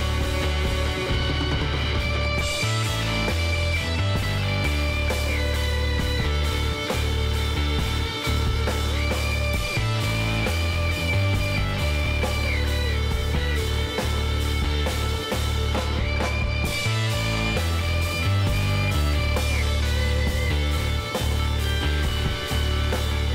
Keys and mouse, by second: 0.0 Tab, 1.2 a, 1.6 click, 1.8 middle click, 3.0 middle click, 3.3 Tab, 4.3 middle click, 6.0 middle click, 6.7-8.9 drag, 8.9-14.6 middle drag, 14.6 ctrl+z, 14.6 click, 15.9-21.0 drag, 21.0-23.3 middle drag.